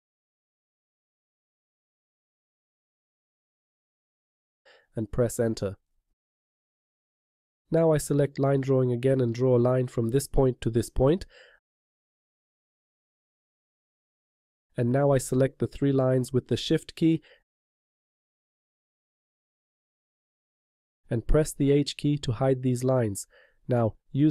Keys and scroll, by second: 0.7 Tab, 22.0 h.